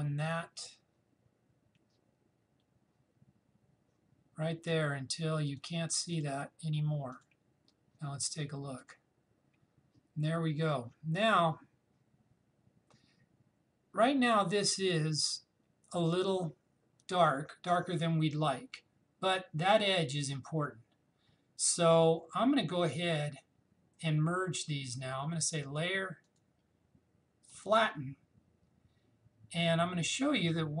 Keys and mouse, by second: 6.1 click, 25.7 click.